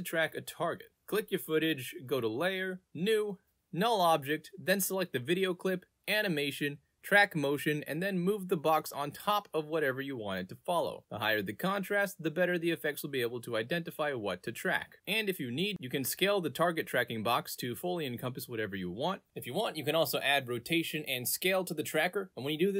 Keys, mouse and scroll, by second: 0.9 alt+z, 1.8-4.0 drag, 5.2 click, 5.9 click, 7.3 click, 7.8 middle click, 7.8-8.1 scroll up 2, 8.4 click, 9.3 click, 9.3 space, 10.4 click, 11.8-13.1 drag, 13.3-15.1 drag, 15.8-17.3 drag, 20.0 click, 20.5 click, 21.6 click, 22.4 ctrl+z.